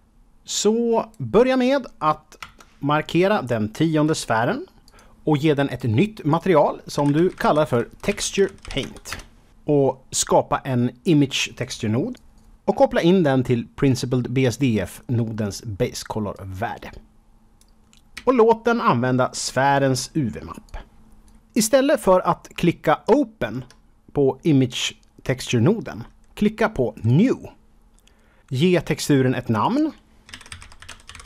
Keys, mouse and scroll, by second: 2.3 KP_0, 4.7 click, 4.8 click, 5.6 click, 6.2 click, 6.8-8.8 typing, 9.0 Return, 9.8 click, 10.7 Home, 11.2 shift+a, 12.1 click, 12.3 click, 16.3 click, 18.1 shift+a, 19.4 click, 19.7 click, 20.6 click, 21.7-22.3 scroll up 4, 23.1 shift+middle click, 27.0 click, 29.6 click, 30.2-31.2 typing.